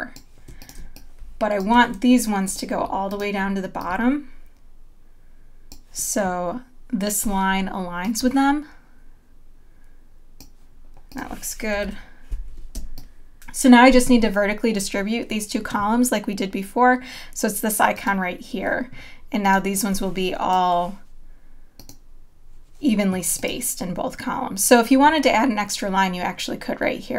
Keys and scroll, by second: 0.8 space, 12.3 super+;, 12.8 space.